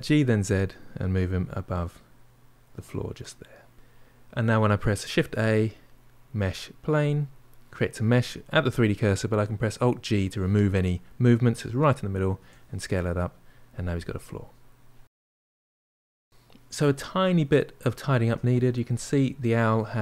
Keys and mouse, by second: 3.7-6.9 middle drag, 6.9 shift+a, 8.3-9.8 middle drag, 9.8 alt+g, 10.6-12.2 middle drag, 12.2 s, 13.9-16.1 middle drag, 16.7-18.7 middle drag, 18.7 click, 19.1-20.0 middle drag.